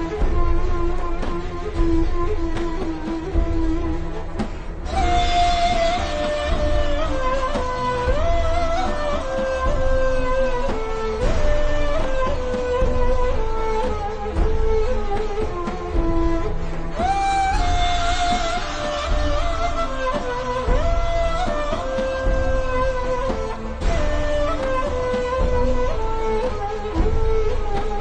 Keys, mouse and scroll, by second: 4.8 click, 8.3 l, 8.4 click, 12.9 v, 13.2 click, 13.6-14.2 ctrl+scroll down 2, 14.2 click, 16.0 click, 18.7-20.2 alt+shift+scroll down 6, 20.4-21.5 alt+shift+scroll up 2, 21.6 click, 23.8 i, 23.9 click, 24.2 v, 24.3 click, 26.5 click, 27.2 BackSpace, 27.5 click.